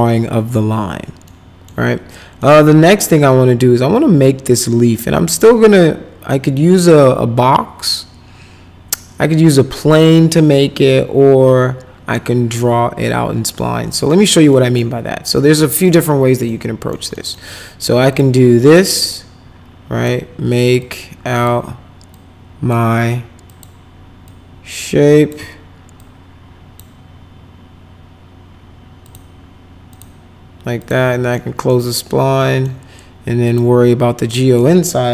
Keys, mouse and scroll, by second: 1.3 middle click, 2.4 middle click, 4.4 middle click, 13.5 middle click, 14.5 middle click, 16.4 middle click, 17.1 middle click, 18.1 click, 19.0 click, 20.8 click, 22.1 click, 23.5 click, 24.2-25.3 drag, 26.0 click, 29.0 click, 29.9 click, 30.8 click, 31.3 middle click, 32.4 middle click, 33.4 click, 34.3 right click.